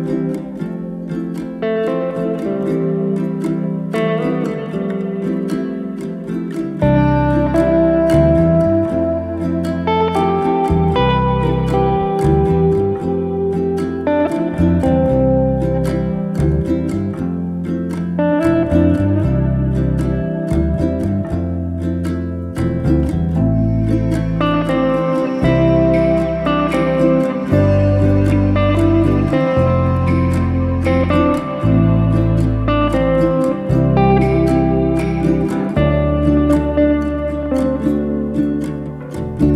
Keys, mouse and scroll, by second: 0.7 Tab, 2.4-5.4 drag, 6.7-8.2 drag, 8.7 Tab, 9.0 click, 9.7-13.2 drag, 13.2 drag, 16.3 click, 17.1-18.6 drag, 18.9-19.2 drag, 23.5 click, 24.7-26.3 drag, 26.6 click, 27.5-28.7 drag, 30.3-31.8 drag, 32.6 click, 36.1 click, 37.4 shift+a, 39.1 click.